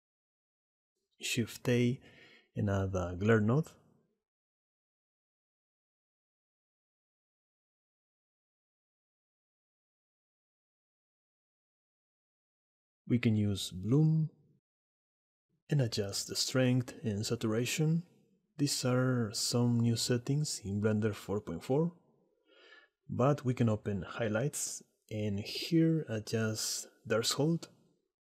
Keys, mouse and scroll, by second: 0.5 click, 1.5 shift+a, 8.8 click, 13.4-14.9 drag, 17.0 click, 17.9 middle click, 19.1 click, 20.7-22.6 drag, 25.2 shift+middle click.